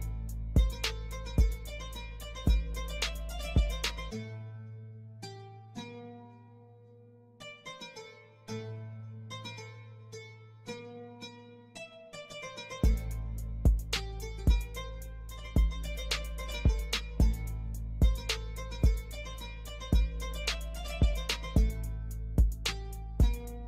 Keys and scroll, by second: 0.2 ctrl+r, 1.3 F3, 3.0 ctrl+g, 5.4 c, 5.9 shift+e, 6.3 F2, 7.0 Escape, 10.8 shift+Page_Down, 17.8 shift+Page_Down, 18.7 F3, 21.4 shift+F2, 21.9 F9.